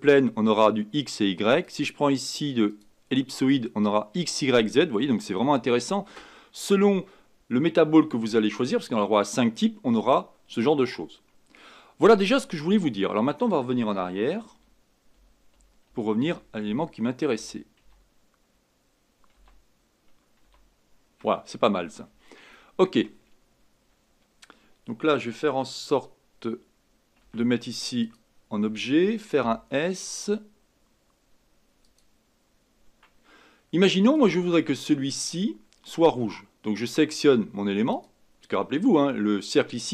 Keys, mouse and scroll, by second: 14.5 ctrl+z, 15.1 ctrl+z, 15.5 ctrl+z, 15.9 ctrl+z, 16.6 ctrl+z, 17.3 ctrl+z, 17.8 ctrl+z, 19.3 ctrl+z, 20.4 ctrl+z, 27.2 Tab, 28.0 click, 29.4 s, 34.1 click, 37.9 click.